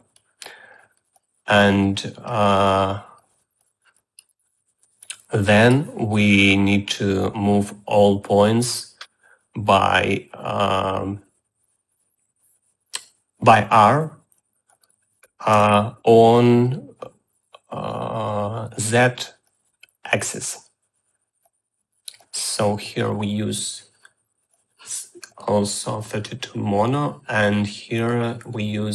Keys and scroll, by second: 16.4 ctrl+c, 16.5 ctrl+v.